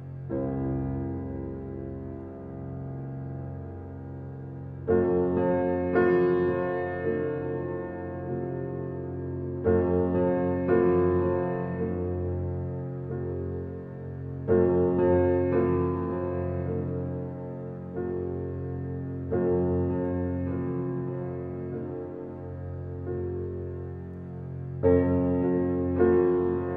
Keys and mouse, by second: 0.5 click, 0.9 click, 4.6-5.3 drag, 8.3 click, 11.0 click, 11.5 click, 12.4 ctrl+z, 13.3 click, 13.7 click, 14.2 ctrl+click, 14.5 ctrl+z, 15.9-17.3 drag, 17.8 click, 19.0 ctrl+z, 20.5-21.6 drag, 22.1-23.4 drag, 24.0-25.5 drag, 26.0 click.